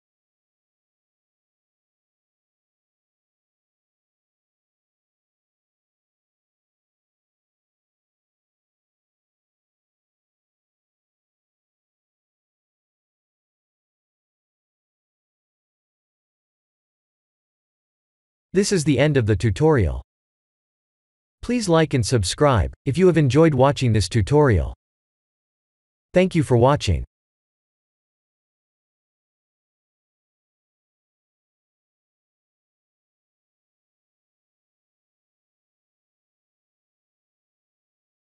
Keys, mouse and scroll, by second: 1.2 ctrl+z, 1.6 middle click, 3.8 middle click, 4.6-4.9 scroll down 2, 4.9 middle click, 5.2 middle click, 5.4 middle click, 7.5 click, 8.3 KP_7, 8.9 KP_2, 9.0 KP_3, 9.6 KP_1, 10.6 r, 17.9-18.4 scroll down 4, 18.4 shift+middle click, 19.0 middle click, 21.2 click, 21.7 middle click, 21.8 middle click, 22.4-23.8 scroll up 1, 23.8 click, 24.6 click, 25.2 Tab, 25.7 Tab, 26.3 click, 28.3 click, 29.1 click, 30.5 middle click, 31.4 shift+middle click, 31.9 shift+middle click, 32.0 middle click, 34.2 middle click.